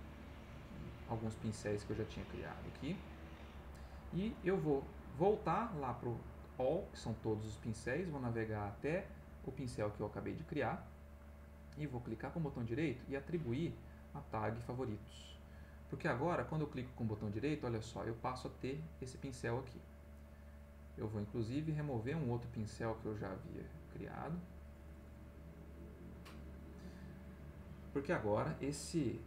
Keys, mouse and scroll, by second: 1.4-3.3 right drag, 5.2-7.1 drag, 9.5-10.8 drag, 11.9-14.8 right drag, 16.3 right click, 21.3 click, 22.2-23.8 drag, 23.8 middle click, 24.2-26.6 right drag.